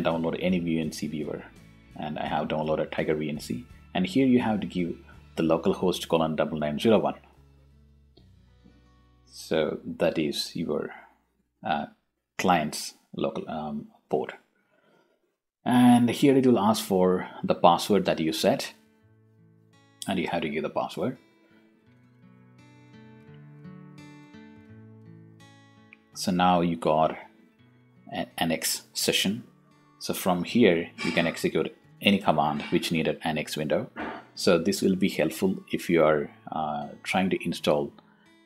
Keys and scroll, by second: 23.5-24.2 typing, 24.7 Return, 30.2 Return, 33.2 x, 34.1 e, 34.4 Tab, 35.6 Return.